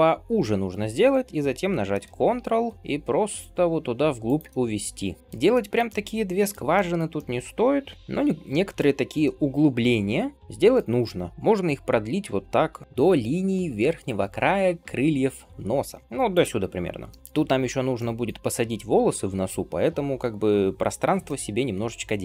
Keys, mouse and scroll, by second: 4.9 alt+z, 5.4 shift+middle click, 5.9 middle click, 6.6-9.8 shift+middle drag, 7.9 s, 9.8 g, 10.3 middle click, 10.9 g, 11.3 scroll down 1, 11.4-12.6 middle drag, 12.6 g, 16.0 g, 16.8 scroll down 2, 17.2-20.0 middle drag, 17.8 scroll up 1, 21.1-22.2 middle drag.